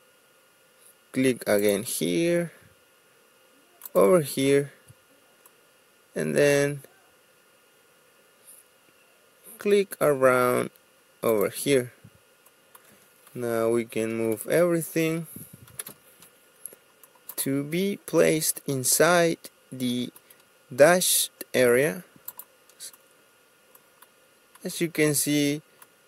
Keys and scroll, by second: 14.3 ctrl+a, 15.8 m, 15.8 space.